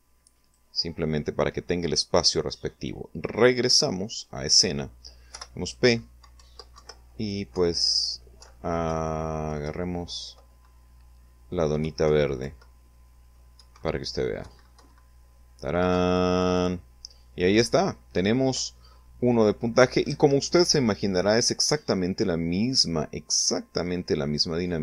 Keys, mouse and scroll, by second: 2.4 click, 3.1 click, 4.3 p, 5.4 Up, 5.8 Right, 6.5 Right, 7.4 Up, 7.9 Right, 10.8 Right, 11.5 Left, 12.6 Right, 13.4 Right, 14.9 Down, 19.1 Escape, 22.8 click, 24.5 click.